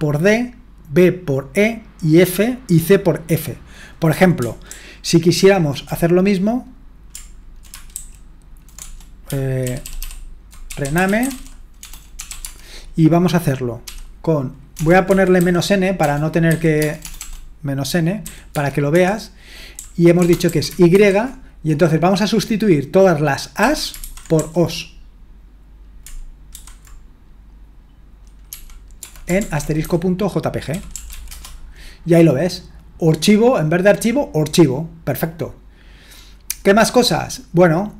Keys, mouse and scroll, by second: 3.7 click, 4.7 ctrl+p, 5.4 ctrl+p, 8.0 alt+g, 8.8 BackSpace, 9.6 ctrl+w, 9.8 ctrl+w, 10.0 ctrl+w, 10.5-12.9 typing, 15.0-17.2 typing, 18.2-20.9 typing, 23.4-24.9 typing, 26.5 typing, 29.0-31.6 typing.